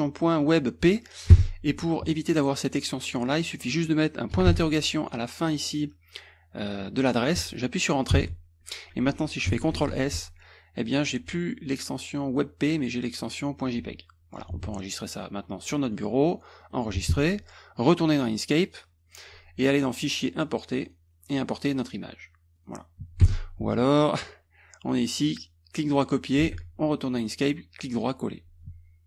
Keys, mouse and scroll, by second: 1.4 Escape, 2.1 click, 3.2 click, 4.5 shift+,, 5.5-7.0 drag, 8.2 Return, 9.7 ctrl+s, 10.8 click, 15.7 click, 16.6 click, 18.3 click, 19.1 click, 20.1 click, 20.8 click, 22.6 click, 23.3 Escape, 24.2 click, 24.9 right click, 26.0 click, 26.5 alt+Tab, 27.2 right click, 28.0 click.